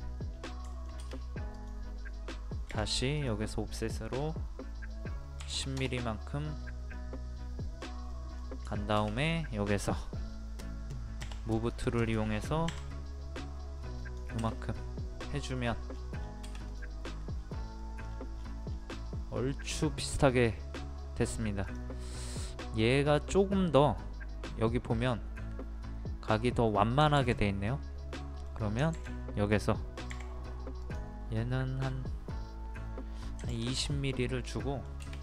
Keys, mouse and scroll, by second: 0.7 shift+middle click, 1.5 click, 2.1-2.7 scroll up 1, 2.7 o, 3.1 click, 5.4 KP_1, 6.9 middle click, 8.6 scroll up 1, 8.9 shift+middle click, 9.1 click, 11.2 m, 11.5 click, 12.6 Up, 14.0 click, 14.5 middle click, 15.6 scroll down 1, 15.7 scroll up 1, 15.8 scroll down 1, 15.9 scroll up 1, 16.1-16.7 scroll down 1, 16.7 click, 17.1 scroll up 1, 17.8 middle click, 18.0 scroll down 1, 19.3-19.7 scroll up 1, 20.7-21.2 scroll down 1, 21.2 scroll up 1, 21.6 click, 22.2 middle click, 23.1-25.0 scroll down 1, 26.4-27.0 scroll up 1, 28.0 scroll up 1, 28.1 middle click, 30.1 o, 30.8-31.9 drag, 33.4 KP_2, 34.5 middle click.